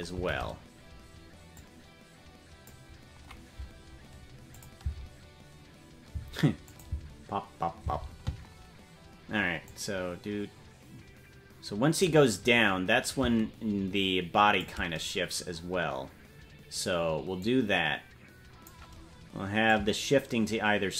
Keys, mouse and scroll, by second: 0.2 Right, 1.5-2.7 drag, 4.5 click, 4.8 space, 6.2 space, 6.6 click, 6.8 space, 9.6-12.1 drag, 9.6 space, 13.1-14.6 drag, 17.4-18.7 drag, 19.6-20.9 drag.